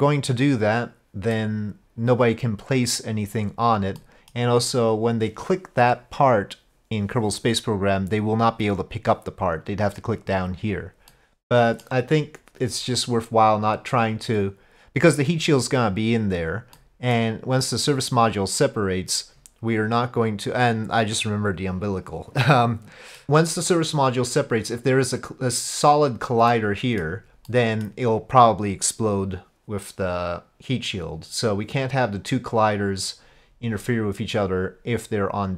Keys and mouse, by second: 4.0-4.4 middle drag, 11.1-11.9 middle drag, 13.1-14.0 drag, 16.8-17.2 middle drag, 26.5-27.0 middle drag, 27.5-27.9 middle drag, 34.5-35.5 drag.